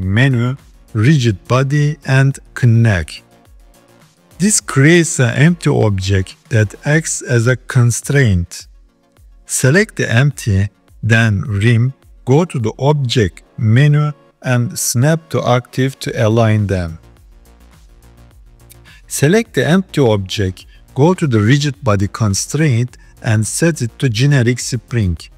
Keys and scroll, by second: 6.4 s.